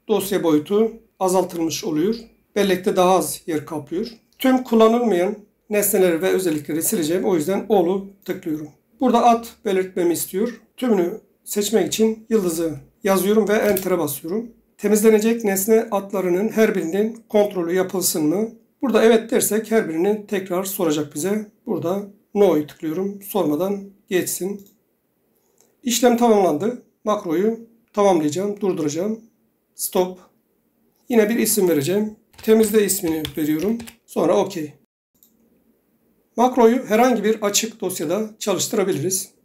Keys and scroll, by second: 12.0 *, 13.8 Return, 32.1-34.4 typing.